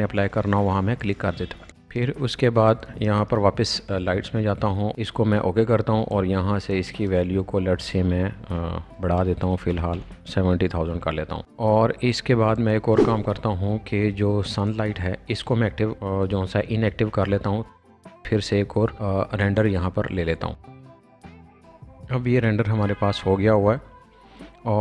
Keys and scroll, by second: 1.7 Escape, 1.8 space, 7.9 7, 9.1 0, 9.3 0.